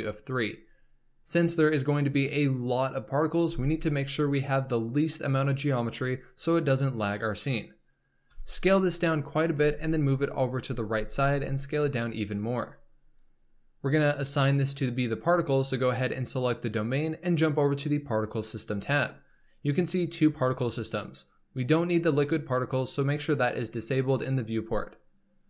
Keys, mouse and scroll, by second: 8.2 s, 9.5 g, 10.9 s, 15.7 click, 17.8 click, 24.7-25.4 drag.